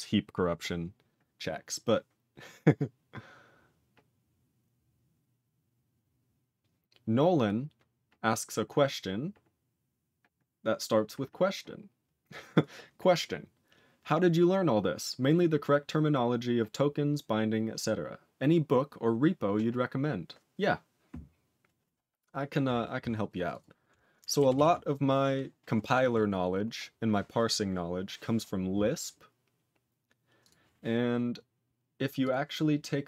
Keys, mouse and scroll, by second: 23.5 click, 23.6 click, 24.5 ctrl+s, 26.3-29.5 scroll up 2.